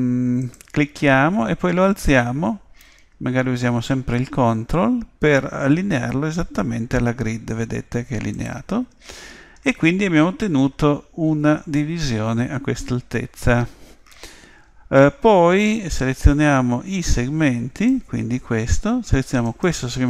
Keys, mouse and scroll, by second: 17.8 click, 19.4-20.0 right drag.